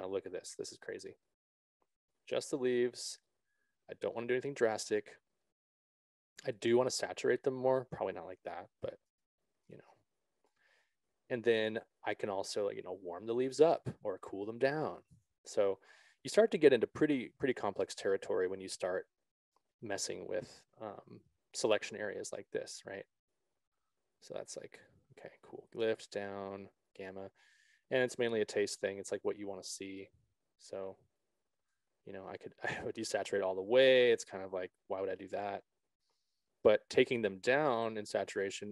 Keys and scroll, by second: 2.1 ctrl+z, 16.5 ctrl+z.